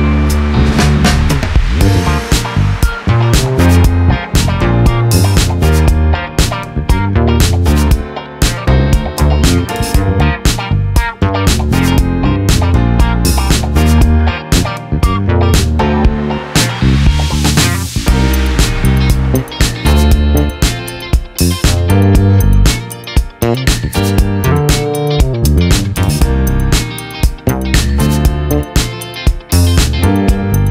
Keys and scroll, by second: 0.1-0.8 typing, 2.7 Return, 5.0-5.3 ], 5.5 ], 6.2 ], 6.3 ], 8.3 ], 8.4 ], 14.4 ctrl+z, 15.6 [, 15.7 [, 17.4 ctrl+=, 20.8 ctrl+z, 23.2 ctrl+z, 25.2 ctrl+z, 28.3 ctrl+-.